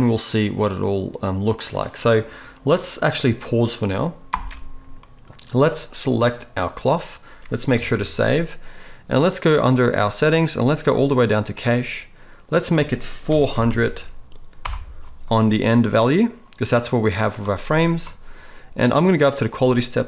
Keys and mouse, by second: 4.5 space, 7.8 ctrl+s, 8.0 ctrl+s, 11.5-20.0 drag, 13.6 0.